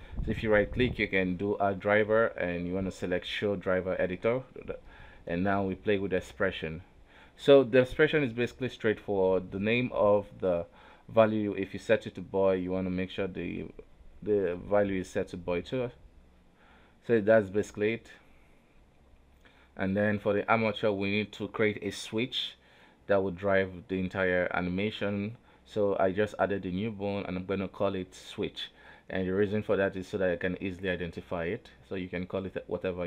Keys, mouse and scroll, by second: 23.2 click, 23.6 middle click, 24.0 KP_1, 24.4 Tab, 24.8 alt+a, 25.1 click, 25.6 shift+a, 26.4 right click, 26.9-28.7 drag, 29.4-32.6 drag.